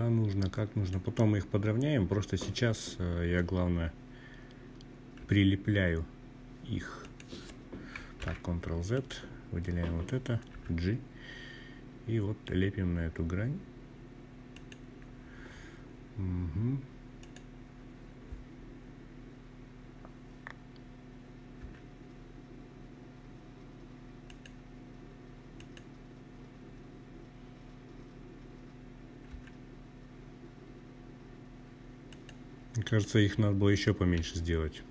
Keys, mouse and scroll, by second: 3.1 g, 5.0 click, 6.3 ctrl+z, 6.9 click, 8.5 g, 12.5 click, 15.1 click, 16.2-16.9 scroll down 3, 16.9-18.2 scroll down 1, 19.6 g, 22.3 drag, 23.5 click, 27.3 g, 30.3 click, 30.8 click, 32.1 g, 34.4 click.